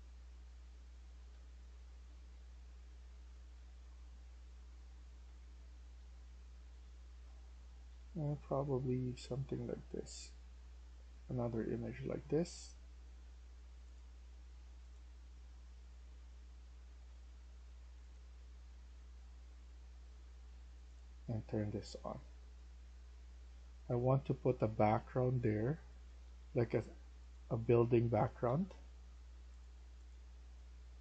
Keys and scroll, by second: 0.7-6.6 typing, 7.8 e, 11.5-12.2 typing, 25.3-26.2 typing, 27.6-29.2 typing.